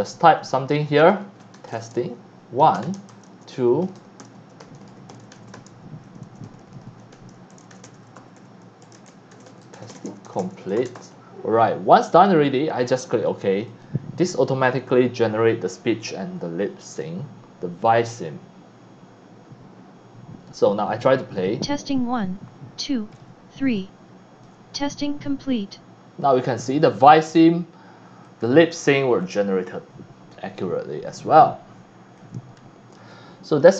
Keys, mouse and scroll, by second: 1.0-12.3 typing, 11.6 right click, 13.2 click, 13.7 click, 21.4 click, 23.1 middle click, 23.1 scroll up 1, 23.4 middle click, 23.4 scroll down 1, 23.7 c, 23.8 click, 26.6 click, 28.2 v, 28.2-28.7 drag, 29.2 click, 29.3 v, 31.2 click, 33.5 click.